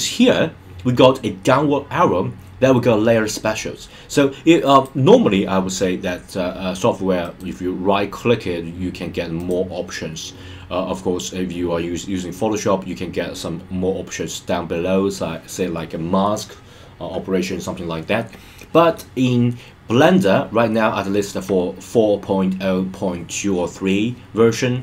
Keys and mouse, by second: 4.7 click, 9.4 click.